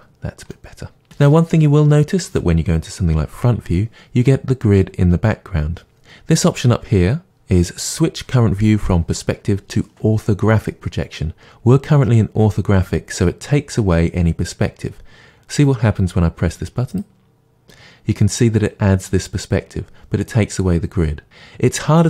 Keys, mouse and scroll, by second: 0.5-16.9 middle drag, 3.4 KP_1, 16.9-18.1 drag.